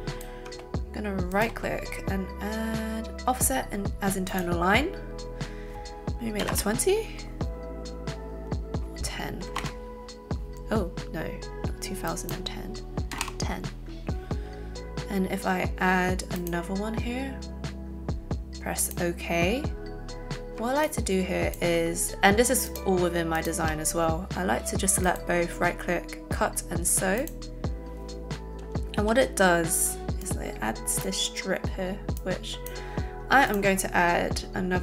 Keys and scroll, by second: 6.4 KP_2, 6.4 KP_0, 6.5 KP_2, 9.5 KP_1, 13.1 KP_0, 13.2 KP_1, 29.1 a.